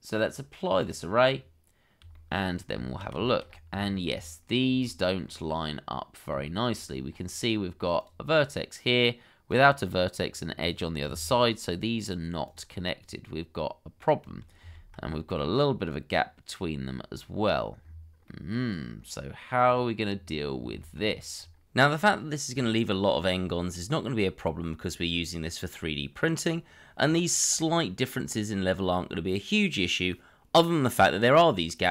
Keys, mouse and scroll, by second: 1.3-2.0 scroll down 1, 2.1 shift+middle click, 2.7 Tab, 3.2 shift+middle click, 3.4-3.8 scroll up 1, 3.8 shift+middle click, 4.1-5.2 shift+scroll up 2, 6.4 shift+middle click, 6.6-7.5 shift+scroll up 2, 12.5 g, 12.7 middle click, 14.6 ctrl+z, 15.1 middle click, 17.5-17.8 scroll down 1, 18.2 middle click, 20.1-20.5 scroll down 1, 20.8 shift+middle click, 21.0-21.3 scroll up 1, 22.1 shift+middle click, 22.1-23.2 shift+scroll up 2, 23.2 middle click, 23.7 scroll up 1, 23.9 scroll down 1, 24.7 middle click, 25.4 shift+middle click, 25.6 scroll up 1, 25.9 shift+middle click, 26.2-27.3 scroll up 1, 27.3 scroll down 1, 28.8 middle click, 30.5 Tab, 31.0 shift+middle click, 31.4-31.9 scroll up 1.